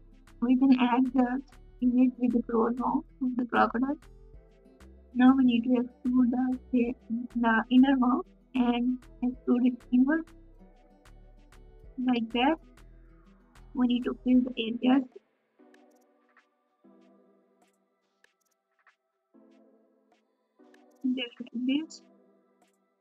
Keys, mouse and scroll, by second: 1.4 KP_1, 4.3 KP_4, 4.3 KP_2, 6.5 Tab, 6.5 KP_3, 14.8 ctrl+KP_Add, 14.8 alt+z, 14.8 g, 16.3 s.